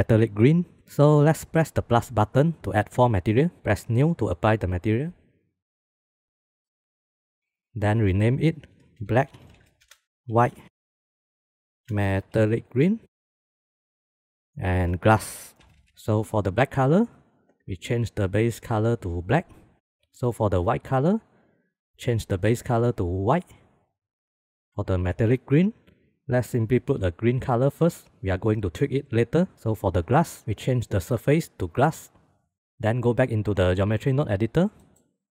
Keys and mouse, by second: 0.7 ctrl+s, 2.8 click, 3.0 click, 3.3 click, 4.8-5.9 drag, 6.1 click, 6.5 click, 7.2 click, 8.6 click, 8.8-10.0 shift+drag, 10.1-11.3 shift+drag, 11.3 click, 11.6-13.9 shift+drag, 12.3 l, 13.2 e, 14.1-15.9 drag, 15.5 s, 16.7-18.5 drag, 20.4 click, 20.7 click, 22.5 click, 25.5 click, 30.1 click, 31.1-32.4 drag, 32.4 middle click.